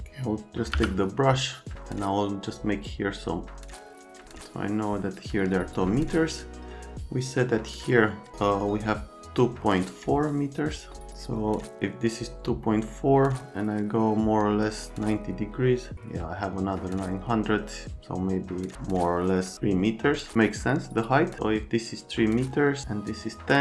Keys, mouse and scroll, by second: 0.7 v.